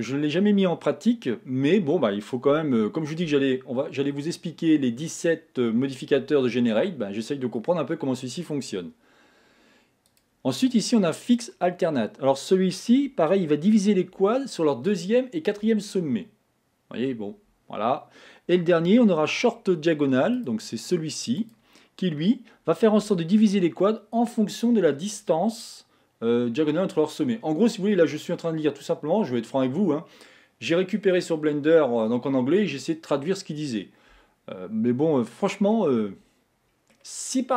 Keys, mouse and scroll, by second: 1.0-1.5 scroll up 1, 1.5-2.6 scroll down 1, 2.6-5.6 shift+middle drag, 10.1-13.1 drag, 20.6-23.4 drag, 35.8-37.5 middle drag.